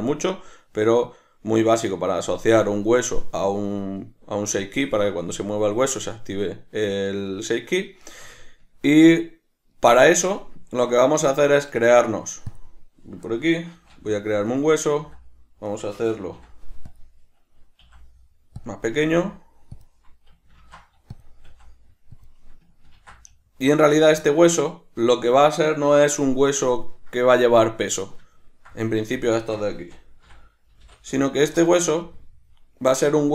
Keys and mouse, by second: 12.5 click, 13.7 shift+a, 14.5 right click, 15.0 s, 15.8 right click, 16.3 ., 17.8 5, 18.7 click, 18.9 s, 19.9 click, 20.6 ctrl+alt+s, 21.2 click, 21.5 s, 22.3 click, 22.9 ctrl+alt+s, 23.7 click, 28.3-33.3 ctrl+middle drag, 29.9 r.